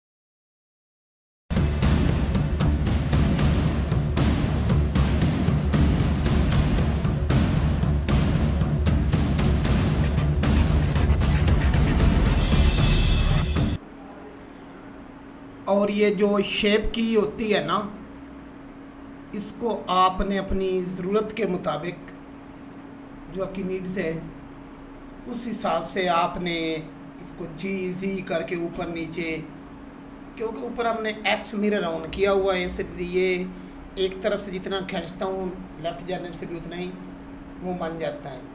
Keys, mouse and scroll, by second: 3.1 click, 4.0 click, 4.6 click, 5.0 click, 5.7 click, 6.1 click, 6.7 click, 8.3 click, 10.7 scroll down 1, 11.1 click, 12.8 scroll down 1, 12.9 shift+click, 13.0 scroll up 1, 13.0 shift+click, 13.2 scroll down 1, 13.3 alt+shift+scroll up 2, 14.3 click, 15.0 Tab, 15.1 scroll up 1, 15.3 click, 16.5 click, 17.2 click, 18.0 click, 18.6 click, 18.9 click, 19.2-19.8 scroll up 1, 19.8 scroll down 1, 20.0 click, 20.8 click, 21.9 click, 22.3 click, 22.7 click, 22.8 scroll down 2, 23.3 click, 24.0 click, 24.2 Tab, 28.1 click, 28.5 right click, 28.6 click, 30.4 Tab, 35.7 click, 36.1 click, 37.1 right click, 38.3 click.